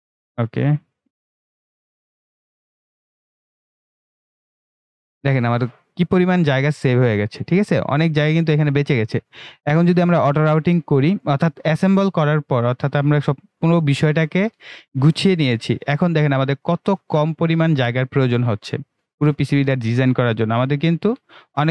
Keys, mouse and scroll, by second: 0.3-3.0 drag, 3.1-3.5 scroll up 1, 3.5-4.6 drag, 4.6-5.1 scroll down 1, 5.1-7.8 right drag, 7.8-11.5 right drag, 11.5-19.6 drag, 19.7-21.7 right drag.